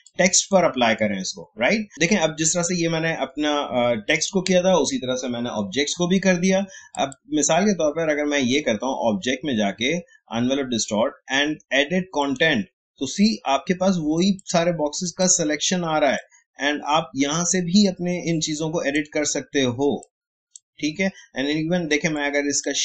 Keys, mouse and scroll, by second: 6.9 click, 21.4 a, 22.1-22.8 drag.